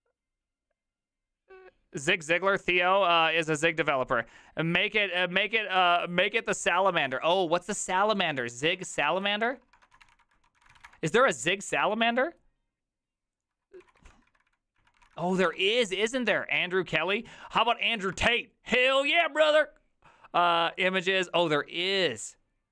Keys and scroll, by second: 8.3-11.3 typing, 13.8 ctrl+Left, 14.0 ctrl+Left, 14.3 Right, 14.5 Right, 14.8-15.7 typing, 18.1 BackSpace, 19.0 Return.